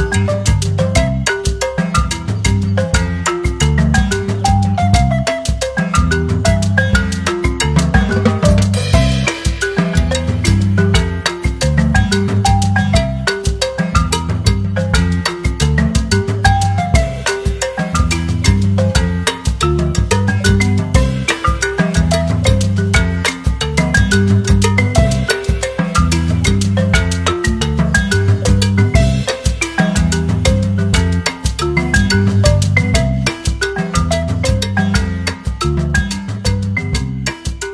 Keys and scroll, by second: 2.2-4.7 typing, 6.4-7.5 typing, 16.5 ctrl+c, 16.7 ctrl+v, 26.7 typing, 30.4-33.8 typing, 35.5-37.1 typing.